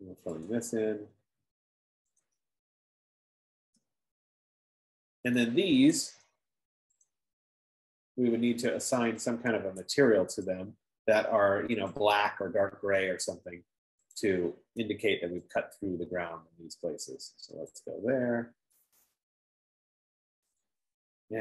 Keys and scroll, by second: 4.1 Return.